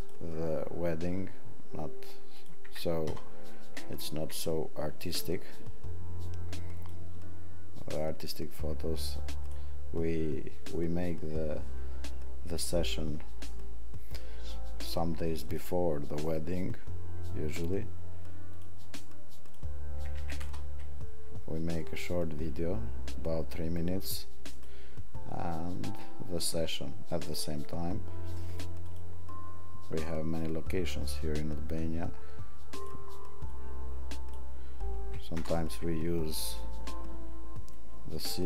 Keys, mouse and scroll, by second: 19.6 click.